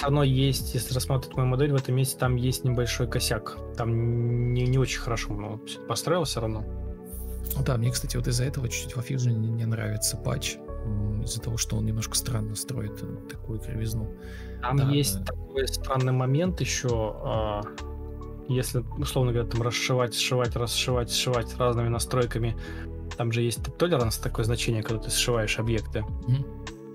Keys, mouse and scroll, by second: 0.2 ctrl+z, 0.6 ctrl+v, 8.9-10.9 typing, 13.2 ctrl+space, 14.6 Escape, 14.7 ctrl+space, 16.8 Delete, 17.2 ctrl+space, 20.8 ctrl+space, 21.0 ctrl+e, 21.2 b, 22.3 ctrl+space, 22.8 alt+r, 26.2 ctrl+Up, 26.3 ctrl+Right, 26.6 ctrl+Page_Up, 26.6 ctrl+Page_Down.